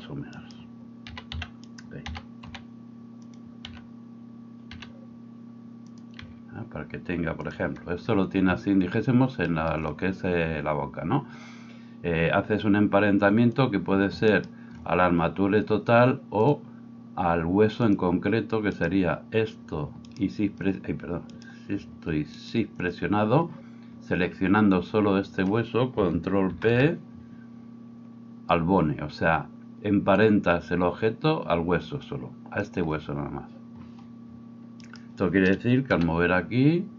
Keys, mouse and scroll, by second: 1.1 s, 2.1 s, 3.7 t, 4.7 r, 6.2 g, 14.3 shift+click, 16.5-36.9 drag, 18.8 right click, 20.1 shift+middle click, 20.1 shift+right click, 21.4 middle click, 21.4 right click, 22.3 shift+middle click, 22.3 shift+right click, 22.8 middle click, 25.9 ctrl+middle click, 26.5 ctrl+p, 34.9 middle click, 34.9 right click, 35.9 r.